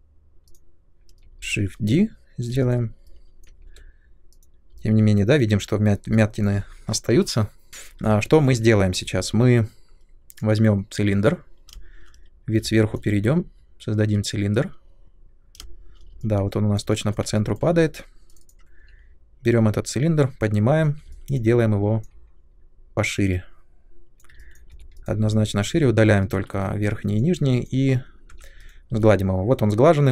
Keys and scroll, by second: 2.4 space, 3.6 3, 7.7 Delete, 11.7 ctrl+space, 15.6 ctrl+space, 18.8 w, 20.8 r, 24.7 3, 26.5 Delete, 28.2 Tab.